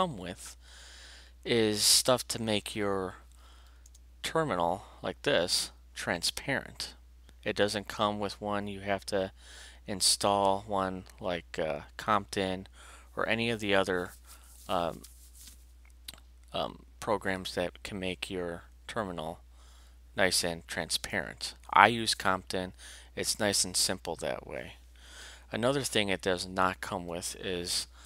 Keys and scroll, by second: 3.9 alt+Return, 27.1 alt+shift+q.